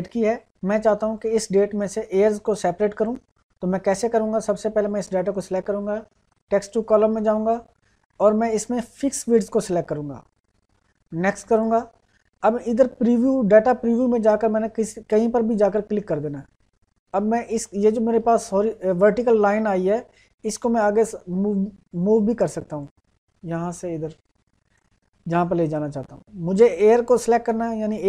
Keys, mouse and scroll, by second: 9.4 click, 15.7 click, 21.3-28.0 drag.